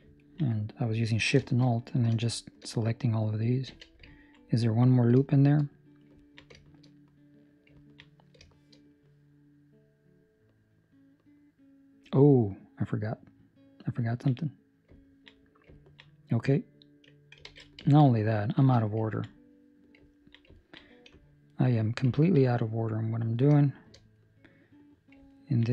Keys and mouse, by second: 0.1 ctrl+middle click, 0.4 middle click, 1.0 ctrl+middle click, 1.4 shift+middle click, 1.6 middle click, 2.5 shift+middle click, 2.8 middle click, 3.6 z, 4.1 ctrl+middle click, 4.4 middle click, 5.5 shift+middle click, 5.6 middle click, 6.2 ctrl+middle click, 6.5 shift+middle click, 7.0 middle click, 7.8 ctrl+middle click, 8.4 shift+middle click, 8.9 middle click, 14.1 ctrl+middle click, 14.3 middle click, 14.9 ctrl+middle click, 15.7 ctrl+middle click, 16.0 middle click, 17.4 alt+a, 17.8 ctrl+middle click, 18.0 middle click, 18.5 z, 19.0 ctrl+middle click, 19.2 middle click, 20.0 ctrl+middle click, 20.5 ctrl+middle click, 21.4 alt+right click, 22.1 ctrl+middle click, 22.4 middle click, 23.5 shift+middle click, 24.1 middle click, 25.2 ctrl+middle click.